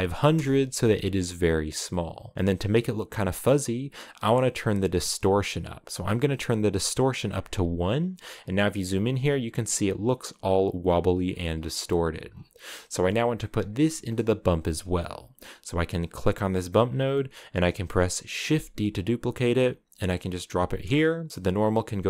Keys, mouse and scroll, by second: 1.2-1.7 scroll up 2, 5.3-7.6 drag, 8.0-8.7 scroll up 9, 10.9-12.5 scroll down 22, 12.5-15.9 middle drag, 15.9-18.2 drag, 18.2 shift+d.